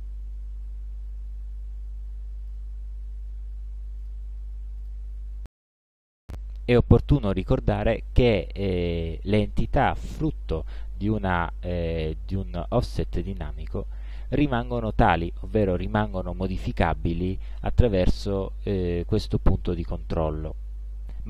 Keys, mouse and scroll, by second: 4.1 click, 4.8 click, 6.2 click, 6.8 click, 8.0 click, 12.5-14.7 drag, 16.2-18.5 drag.